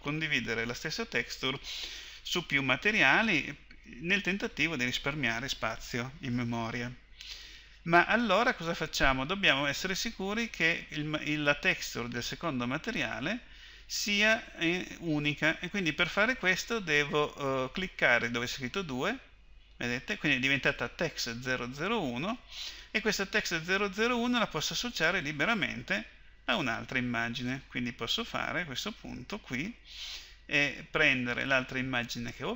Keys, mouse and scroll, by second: 11.0-12.4 middle drag, 12.4-17.4 drag, 18.9-31.0 middle drag, 31.0-32.5 drag.